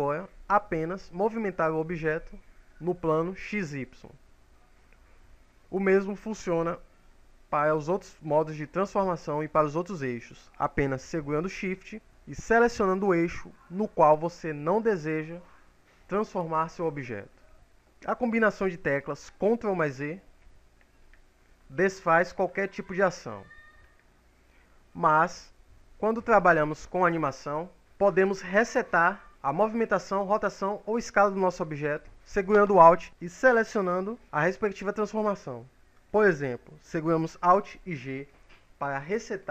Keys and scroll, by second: 10.4 shift+x, 12.1 shift+y, 13.4 shift+z, 18.4 ctrl+z, 37.5 alt+g.